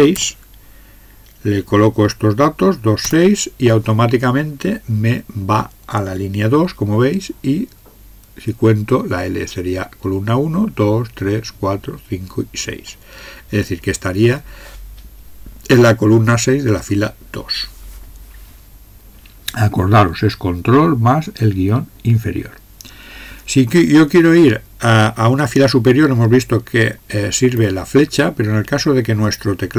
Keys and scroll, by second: 3.1 Return, 27.6 Up.